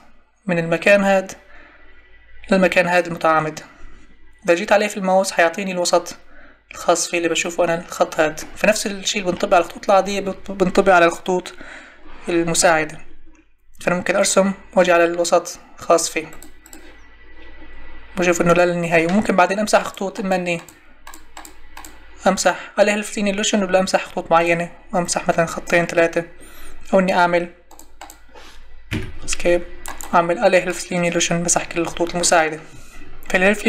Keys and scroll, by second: 28.9 Escape.